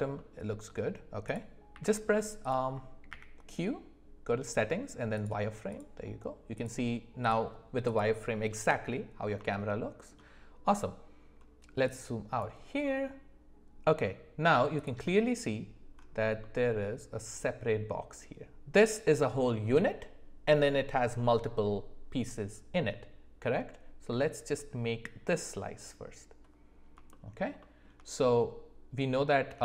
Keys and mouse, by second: 1.7 z, 3.1 q, 5.7 click, 6.5 click, 7.8 click, 9.5 shift+middle click, 27.1 shift+middle click, 27.6 shift+middle click, 29.4 d.